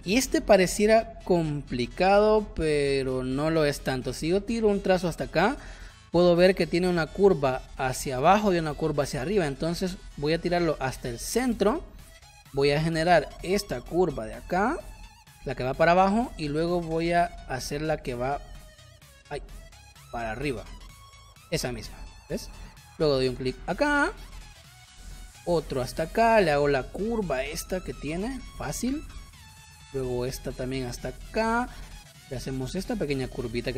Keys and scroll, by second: 15.1 space, 23.9 space, 28.2 space.